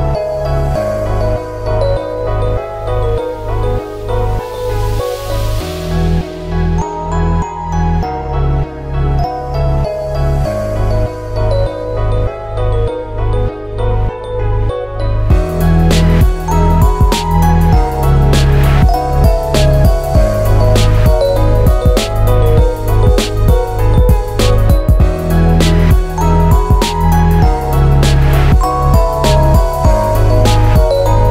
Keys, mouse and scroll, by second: 0.8 Tab, 1.6 u, 6.7 Tab, 7.4-8.0 scroll up 8, 8.0 Tab, 8.7 click, 9.4 Tab, 10.5 l, 10.9 r, 13.4 click, 13.8 l, 14.6 l, 20.3 Tab, 22.6 click, 23.2 click, 23.4 scroll up 2, 24.0 l, 25.2 l, 27.8 middle click, 29.0 click, 29.4 middle click, 29.7 Tab, 30.3 click, 30.8 click, 30.8 middle click.